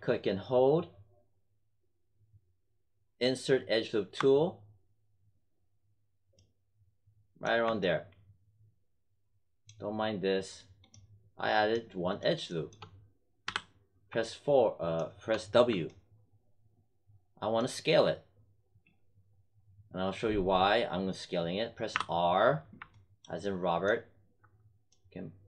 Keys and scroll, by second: 13.4 w, 21.8 r.